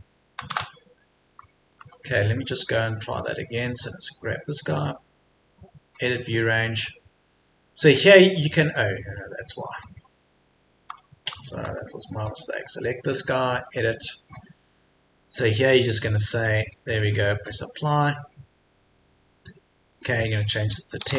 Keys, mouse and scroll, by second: 1.0-1.6 scroll down 1, 1.6 Escape, 3.8-4.6 scroll down 1, 4.6-10.6 drag, 10.9 Escape, 11.3 scroll down 1, 11.6 Escape, 12.2-17.3 drag, 21.0 KP_1.